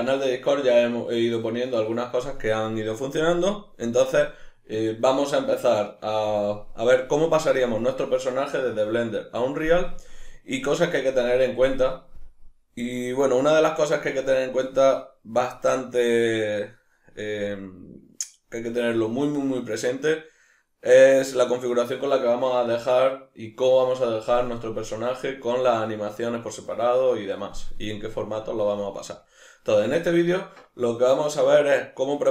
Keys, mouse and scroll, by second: 24.1-25.3 middle drag.